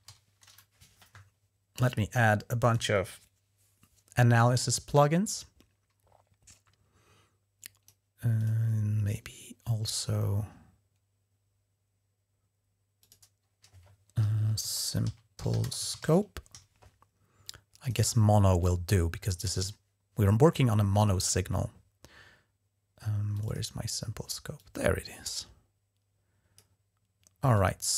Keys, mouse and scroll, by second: 0.0-0.1 typing, 1.5-2.7 drag, 4.7-7.7 drag, 8.2 click, 8.9 right click, 12.8 click, 14.4-16.3 typing, 17.6 click, 18.4 click, 23.1 click, 24.4-26.4 drag, 27.3 click.